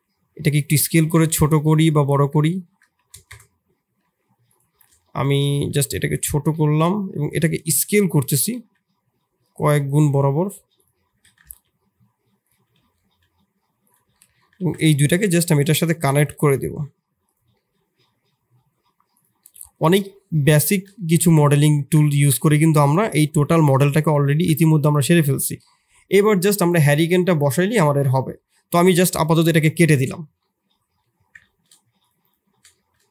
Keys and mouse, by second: 0.7 g, 2.2 r, 4.0 s, 5.0 shift+click, 5.7 s, 8.3 s, 11.0 g, 12.7 s, 14.2 middle click, 14.6 shift+z, 14.8 middle click, 15.7 shift+middle click, 16.3 g, 17.6-18.6 middle drag, 19.3-20.1 middle drag, 20.6 shift+middle click, 20.9-21.6 middle drag, 22.1 ctrl+s, 22.7 middle click, 24.2 shift+middle click, 30.4 middle click, 31.0 middle click, 31.4 shift+middle click, 32.6 shift+middle drag.